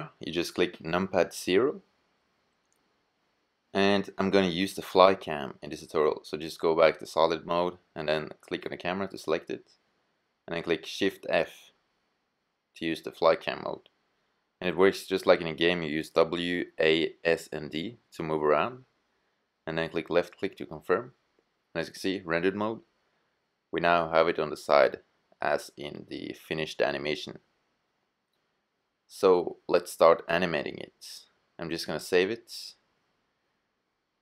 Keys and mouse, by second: 0.9 KP_0, 5.5-6.6 middle drag, 6.6-7.9 drag, 7.9-9.5 middle drag, 9.5 shift+f, 9.9 middle click, 19.6 drag, 19.9-20.6 middle drag, 20.6-21.2 drag, 21.2 middle drag, 21.7-30.8 middle drag, 32.3-34.0 middle drag.